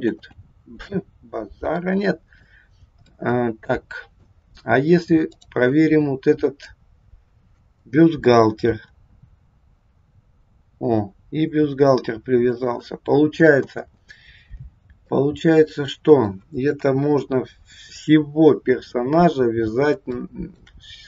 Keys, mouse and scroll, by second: 0.1 ctrl+z, 1.2-1.7 scroll down 3, 1.7 middle click, 2.6-3.1 scroll up 2, 3.1 middle click, 5.4 click, 6.6 middle click, 8.7 r, 13.7 ctrl+z, 15.1 middle click, 16.6 KP_1, 19.5 scroll up 1, 20.0 shift+middle click.